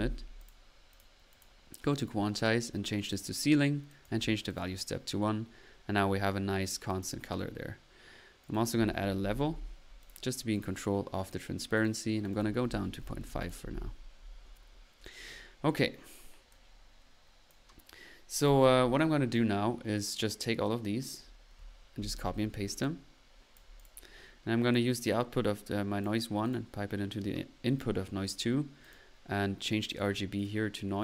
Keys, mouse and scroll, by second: 0.0-0.1 typing, 1.9 drag, 2.4 click, 3.0 click, 3.9 click, 4.9 middle click, 6.9 click, 8.4 right click, 8.9-9.8 typing, 10.9 middle click, 11.8-12.8 drag, 14.3 middle click, 15.0-15.7 typing, 16.5 click, 16.9-17.7 typing, 17.6 click, 19.3-21.3 drag, 22.0-22.7 typing, 22.8-24.2 ctrl+drag, 24.3 middle click, 24.9-26.1 drag, 26.4 drag, 27.8-28.5 typing, 28.8 click, 29.9 click, 30.4 click.